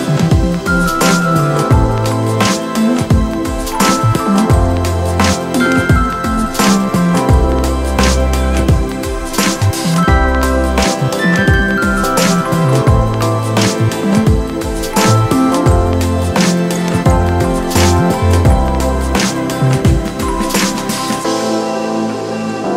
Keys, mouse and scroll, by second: 5.5 ctrl+0, 20.2 alt+shift+click.